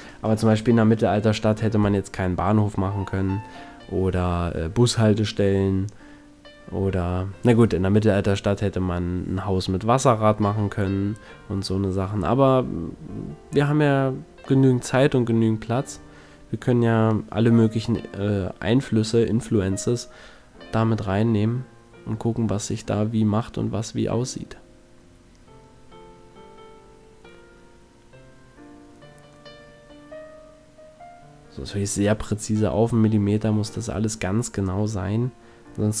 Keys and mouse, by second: 1.2 KP_1, 4.9 s, 8.0 s, 14.3 click, 14.5 a, 15.3 Tab, 15.6-16.7 middle drag, 18.3 Tab, 19.4 ctrl+z, 19.7 ctrl+z, 20.2 ctrl+z, 20.9 ctrl+z, 22.0 s, 25.3 s, 30.7 a, 31.3 middle click, 31.5 Tab, 33.4 Tab, 33.9 ctrl+z, 34.7-35.5 ctrl+z, 35.9 ctrl+z.